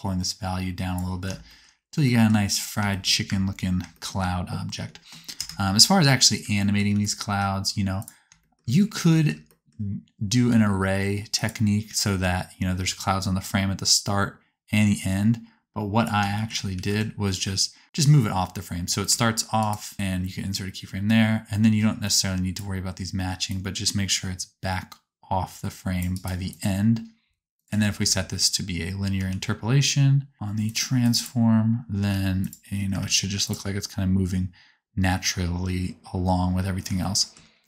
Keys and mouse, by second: 3.3 space, 4.3 space, 5.3 KP_0, 6.2-8.1 drag, 6.9 g, 8.1 shift+middle click, 10.4 g, 14.1 click, 16.8 g, 17.8-19.0 middle drag, 19.0 shift+click, 19.7 middle click, 22.0 click, 22.0 right click, 27.9 a, 29.1 t, 30.3 click, 30.7 click, 31.1 click, 31.3-32.9 drag, 32.0 t, 32.9 space, 33.5-35.9 drag, 33.5-37.6 middle drag, 33.5-35.9 right drag.